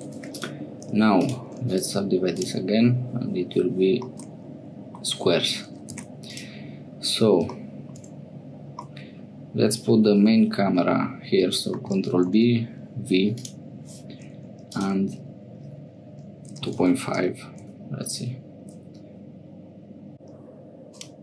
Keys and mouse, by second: 0.3 3, 0.3 click, 4.1 middle click, 6.1 1, 6.3 click, 8.9-10.2 drag, 11.8 ctrl+b, 14.7-21.2 drag.